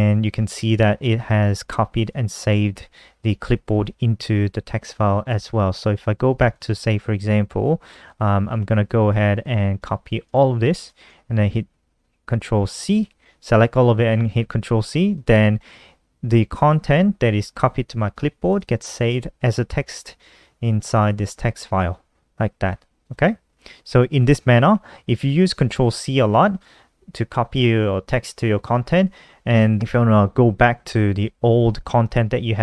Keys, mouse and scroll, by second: 0.4 click, 5.0 click, 6.2 click, 7.4-9.1 scroll down 1, 9.1 click, 9.7 scroll up 1, 10.4 shift+click, 12.4 ctrl+c, 14.8 click, 18.2 click, 19.5-20.1 scroll down 1, 20.1-20.7 scroll down 2, 20.7 scroll up 2, 22.7 click, 24.2 click, 24.8 click.